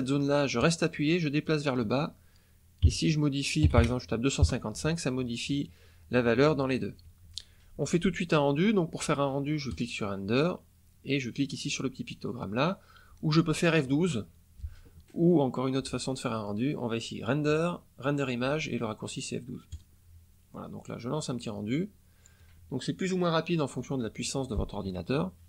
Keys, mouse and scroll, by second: 0.5-1.6 drag, 2.8 KP_2, 3.6 KP_5, 4.4 KP_Enter, 9.6 click, 16.3 click, 19.6 click, 21.5 scroll down 1.